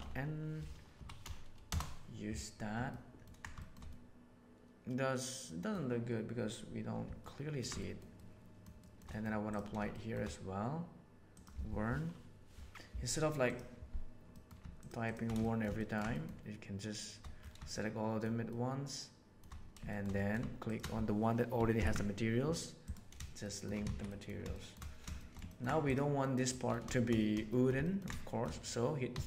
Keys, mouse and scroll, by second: 2.2 right click, 2.8-3.2 ctrl+middle drag, 3.5 shift+middle click, 3.8-5.6 middle drag, 7.1-7.5 ctrl+middle drag, 7.7 shift+middle drag, 8.1-8.5 shift+middle drag, 8.7 shift+middle drag, 9.0 middle drag, 9.4 click, 9.8 shift+middle drag, 11.2-13.5 drag, 14.2 middle click, 15.3 shift+middle drag, 15.7 ctrl+middle click, 16.1 shift+middle click, 17.6-18.1 shift+middle drag, 18.4-19.3 shift+middle drag, 19.8 shift+middle click, 20.1 middle click, 20.6 shift+click, 21.7 ctrl+l, 23.4 shift+middle drag, 23.8 alt+a, 24.0 middle click, 24.4 shift+middle drag, 25.1 middle click, 25.4 ctrl+middle click, 25.8 click, 26.1 middle click, 27.4 shift+middle drag, 27.8 ctrl+middle click, 28.2 shift+middle click, 29.0 3.